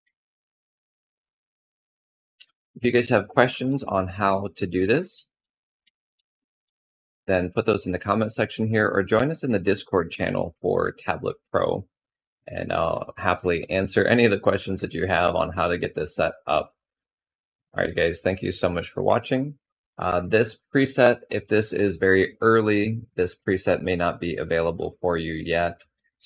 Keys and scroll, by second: 3.2 ctrl+z.